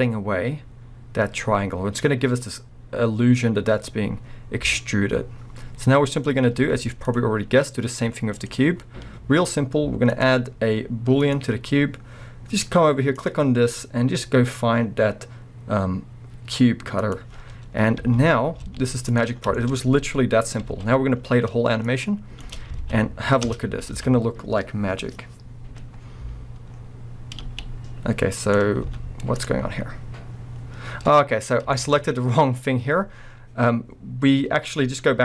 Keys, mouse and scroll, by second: 6.4 scroll up 2, 6.6 z, 7.2-8.3 scroll up 2, 8.3 click, 17.5-18.0 scroll down 2, 18.0 z, 19.1-19.5 drag, 19.3 scroll down 2, 19.5-21.9 shift+middle drag, 19.8-20.5 scroll up 1, 20.6 alt+scroll up 1, 20.9 a, 21.9-23.5 drag, 22.5 space, 22.8 alt+a, 23.9 alt+a, 25.9 scroll up 2, 26.7 scroll down 2, 27.5 space, 28.5 click, 28.9 z, 29.7 scroll up 1, 31.1-31.8 scroll down 1, 31.8-35.2 shift+middle drag, 32.0-34.8 scroll up 1.